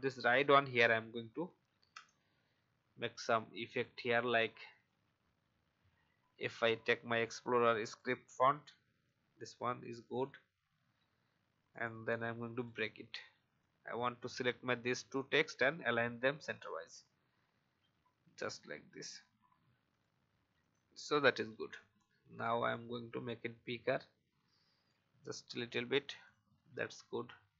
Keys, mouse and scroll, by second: 1.9 BackSpace, 2.2 shift+r, 3.7 click, 4.9-5.2 typing, 7.8 click, 10.5-10.9 alt+scroll up 1, 11.7 right click, 12.5 click, 17.0 Left, 17.5 Left, 17.8 Left, 18.2 Left, 18.7 Left, 19.9-21.7 drag, 21.3 Up, 22.7 alt+shift+click, 25.0 Down, 25.2 Down, 26.2 click, 26.8-27.2 scroll down 1, 27.3-27.5 alt+scroll up 1.